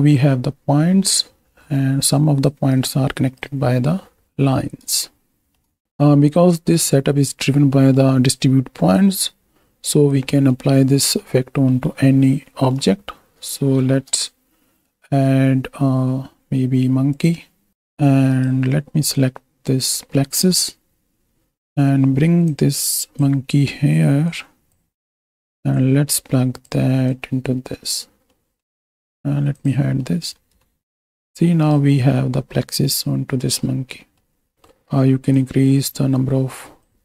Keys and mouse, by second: 1.7 middle click, 2.1-2.4 drag, 2.8 click, 4.2 ctrl+space, 5.0 shift+middle click, 5.9 click, 7.7 click, 8.9-10.1 drag, 10.3 click, 11.2-11.7 drag, 12.5 click, 13.9 shift+a, 22.4 click, 22.7-24.7 drag, 24.9-26.7 drag, 27.3-28.0 drag, 28.3 middle click, 29.5 click, 30.1 middle click, 30.6-31.1 middle drag, 31.6 right click, 32.1-33.6 drag, 32.1-33.6 right drag, 34.0 middle click, 34.5 middle click, 35.3-36.9 drag.